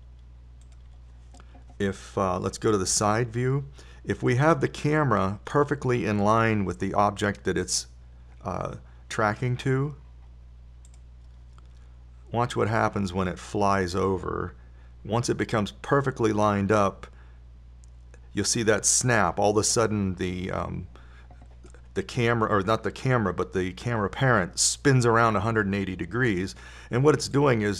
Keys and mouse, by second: 0.1 shift+d, 0.9 shift+d, 4.3 KP_3, 4.5 KP_3, 12.3 right click, 14.1-16.3 drag.